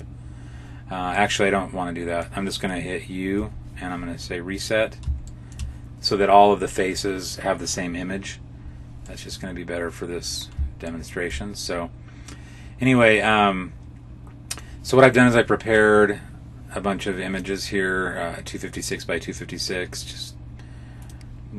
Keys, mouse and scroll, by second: 1.0 middle click, 3.3 u, 5.1 shift+middle click, 9.0 middle click, 10.8 shift+middle click, 11.5 middle click.